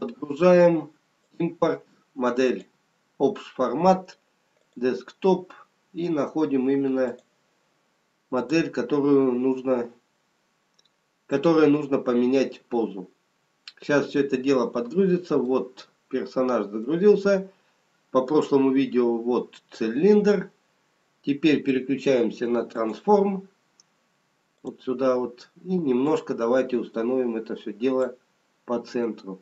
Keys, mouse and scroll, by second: 15.4 middle click, 17.7-19.2 scroll down 1, 22.8 click, 24.9 click, 28.7 scroll down 2.